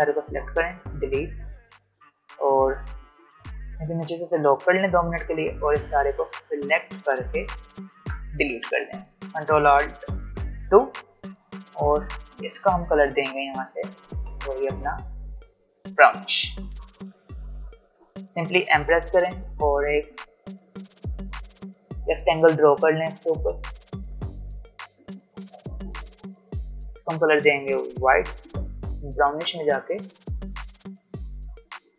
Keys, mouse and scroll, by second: 4.3 ctrl+2, 4.9-10.2 drag, 10.2 ctrl+alt+2, 14.3 click, 16.9 v, 18.7 m, 21.7-26.7 drag, 26.7 v, 26.9-31.9 drag.